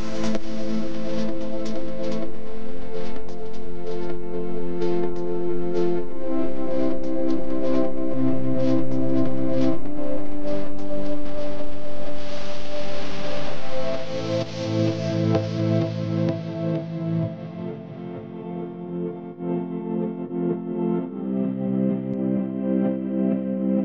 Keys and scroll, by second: 5.8 u, 7.9-8.7 typing, 15.8 a, 16.5 v, 17.6 a.